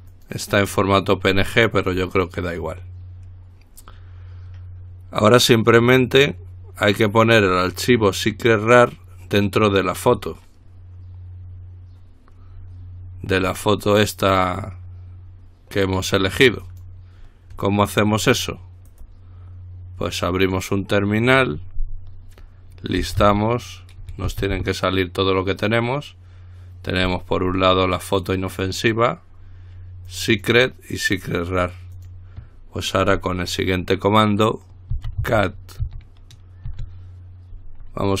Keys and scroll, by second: 24.5 typing, 35.2-36.1 typing.